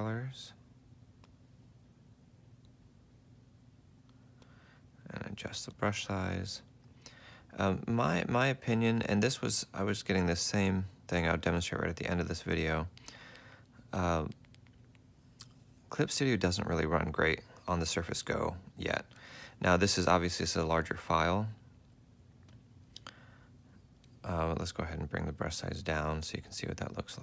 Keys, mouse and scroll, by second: 5.0 ctrl+alt+click, 5.8 ctrl+alt+click, 23.3 ctrl+z, 24.6 ctrl+alt+click.